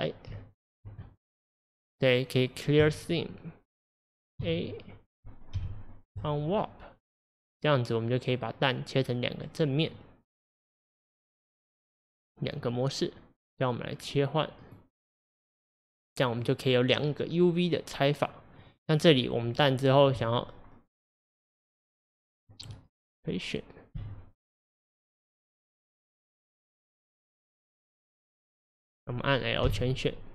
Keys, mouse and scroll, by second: 0.6 alt+click, 1.0-2.9 middle drag, 2.9-4.5 right drag, 4.5 a, 6.3 u, 10.0-15.4 middle drag, 15.4-18.6 drag, 20.2 click, 22.5 click, 24.0 r, 27.7 click, 28.0 click, 29.7 l.